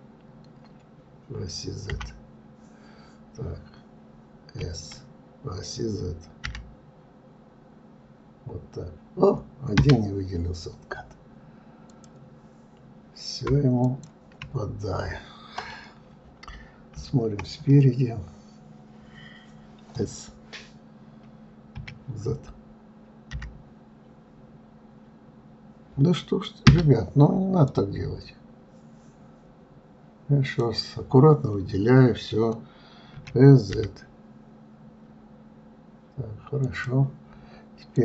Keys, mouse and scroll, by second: 11.8 click, 13.7 shift+click, 16.8 KP_3, 27.5-30.6 drag, 37.8-38.0 drag.